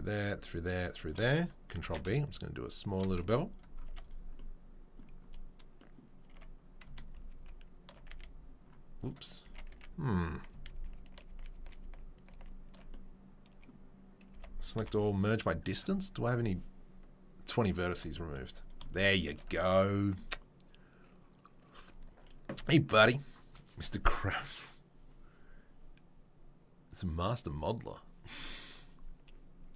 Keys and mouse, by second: 1.1 shift+middle click, 1.4 ctrl+click, 1.8 ctrl+b, 1.9-4.0 shift+middle drag, 3.2 z, 3.9 Tab, 4.0 click, 4.1-9.0 middle drag, 6.2 Tab, 7.1 ctrl+z, 7.4 ctrl+z, 8.1 a, 9.2-29.7 middle drag, 9.4 Tab, 9.7 a, 10.6 ctrl+z, 11.0 ctrl+z, 11.6 ctrl+z, 11.9 ctrl+z, 12.3 ctrl+z, 14.3 a, 14.7 m, 17.9 Tab, 18.6-29.7 shift+drag.